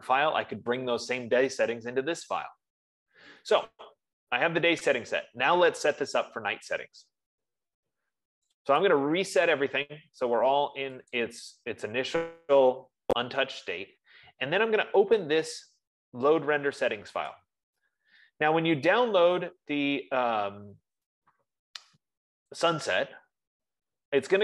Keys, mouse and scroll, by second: 4.9 F15, 9.7 click, 11.7 click, 17.8 click, 23.1 click.